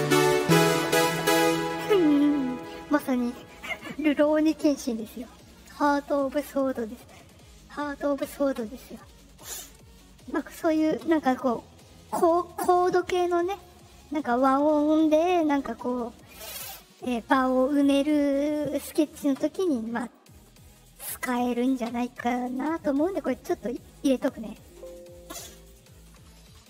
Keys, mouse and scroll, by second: 10.6 click, 19.9 middle click, 19.9 scroll, 21.0 click, 24.5 click, 25.5 click, 26.5 Return.